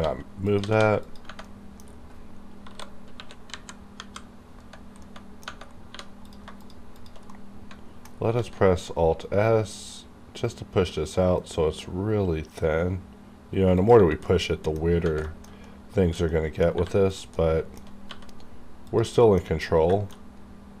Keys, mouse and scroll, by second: 0.0 g, 0.4 click, 0.6 g, 1.0 click, 1.4 middle click, 2.5 scroll down 1, 2.5 KP_7, 4.6 scroll up 1, 5.0 middle click, 5.3 Tab, 5.9 3, 6.2 click, 6.3 click, 6.6 shift+click, 7.3 middle click, 8.3 alt+s, 13.8 click, 14.2 middle click, 14.7 scroll down 1, 15.2 shift+middle click, 16.3 middle click, 16.7 1, 17.1 click, 17.3 middle click, 18.1 g, 18.9 click, 19.1 middle click, 19.6 scroll down 1, 19.9 shift+middle click, 20.2-20.8 shift+scroll down 1.